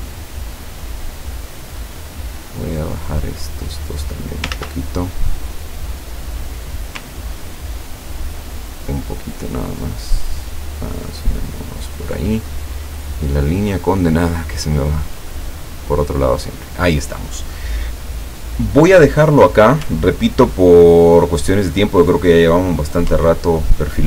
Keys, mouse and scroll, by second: 2.7 click, 4.6 ctrl+z, 5.9 click, 7.7-12.1 ctrl+drag, 12.7 click, 13.2-15.9 drag, 16.7 click, 17.8 click, 20.2-20.7 ctrl+scroll down 4, 21.3-21.9 ctrl+scroll up 4, 23.5 ctrl+scroll down 2.